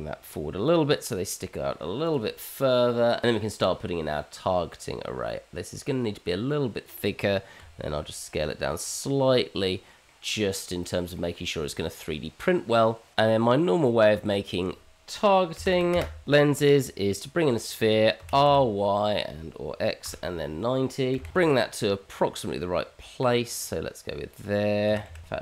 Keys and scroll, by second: 7.5 s, 13.3 shift+a, 19.5 r, 21.3 g, 23.9 g.